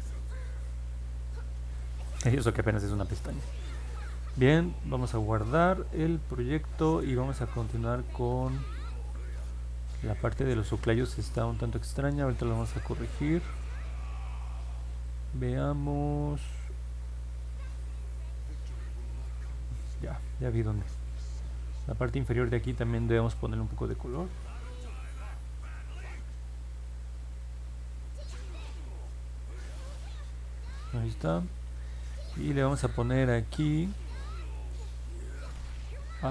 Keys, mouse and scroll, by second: 1.1-1.7 scroll down 2, 1.7 scroll up 1, 1.8 middle click, 2.4 middle click, 8.9-10.5 alt+middle drag, 11.6-16.8 alt+middle drag, 19.4 middle click, 19.9 middle click, 20.8 alt+middle click, 21.3 scroll up 2, 26.3 click, 28.5 click, 29.0 click, 29.5 click, 29.9 click, 30.3 click, 30.6 click.